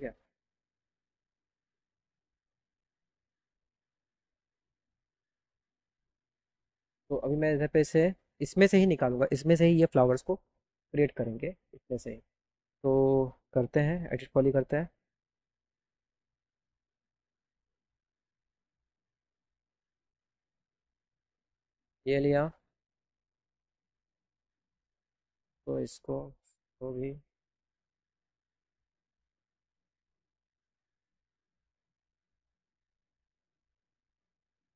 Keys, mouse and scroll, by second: 1.3 right click, 2.0 right click, 4.9 click, 7.7 click, 15.5 e, 16.3 click, 18.6 click, 21.4 right click, 24.8 click, 25.4 click, 26.1 click, 26.8 click, 27.7 click, 28.2 click, 28.8 right click, 29.3 right click, 30.5 right click, 32.4 right click.